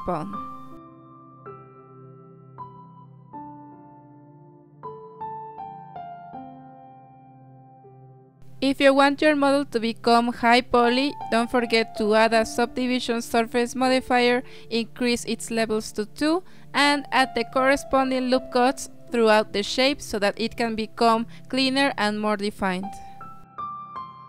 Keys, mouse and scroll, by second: 1.3 g, 2.5-3.0 scroll up 6, 3.6 s, 5.3-5.7 scroll down 3, 6.0 Tab, 6.2 z, 6.6-7.1 middle drag, 7.1-7.4 scroll down 6, 7.4-8.2 middle drag, 8.2 scroll up 2, 8.5-9.3 shift+middle drag, 9.3 ctrl+1, 10.9 click, 12.6-13.6 drag, 13.6-14.2 scroll up 3, 14.3-17.2 middle drag, 17.2 KP_1, 18.8 Tab, 20.2 ctrl+r, 23.7 ctrl+r.